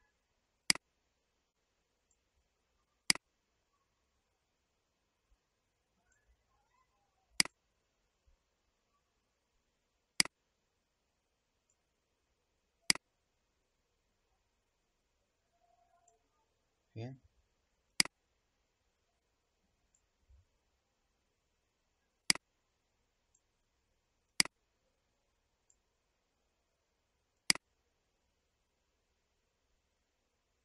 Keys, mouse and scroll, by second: 0.6-6.0 drag, 7.3 click, 8.9-10.1 scroll down 1, 10.1-16.0 drag, 17.8-20.9 drag, 22.2-30.6 drag.